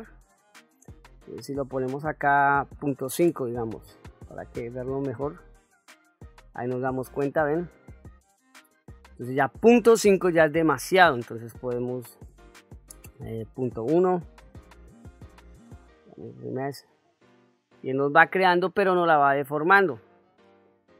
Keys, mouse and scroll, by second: 1.3-4.0 drag, 4.9-5.5 drag, 7.0-7.7 ctrl+middle drag, 7.9 ctrl+middle drag, 8.4-9.2 middle drag, 10.2-11.0 middle drag, 12.3-15.2 drag, 15.9 click, 19.0 ctrl+z.